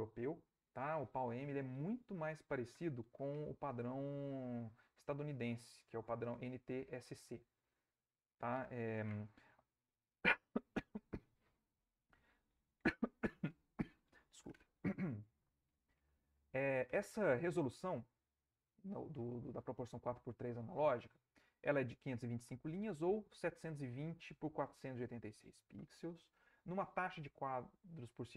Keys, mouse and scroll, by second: 5.7 click.